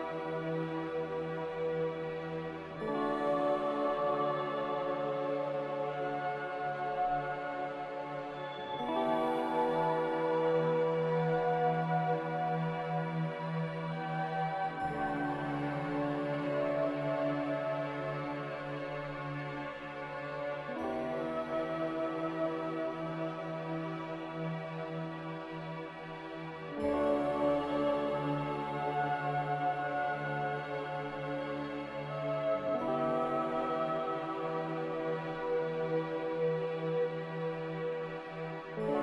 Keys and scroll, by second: 2.5 5, 4.1 g, 8.2 x, 16.4 z, 18.8 2, 19.3 Return, 20.1 c, 20.4 Return, 25.9 z, 29.6 a, 30.7 3, 33.2 typing, 33.6 Return, 37.0 Delete.